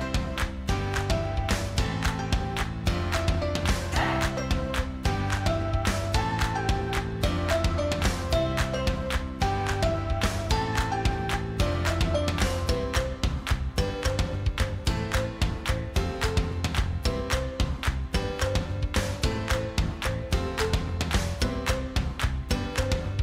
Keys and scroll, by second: 9.8 ctrl+t.